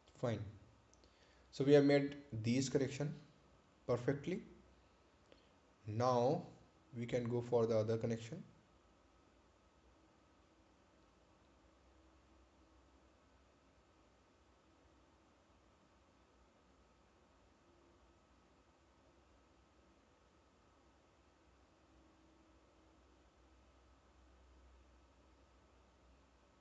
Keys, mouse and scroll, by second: 3.4-3.8 scroll down 1, 5.3 right click, 8.0-8.4 scroll up 1, 9.7 ctrl+click, 11.2 scroll down 1, 16.5-17.0 scroll up 1, 17.7-18.6 scroll down 1, 19.4-19.9 scroll up 1, 20.1-20.7 scroll down 1, 20.7-21.1 scroll up 1, 23.2-24.0 scroll down 1, 24.2-24.9 scroll up 1.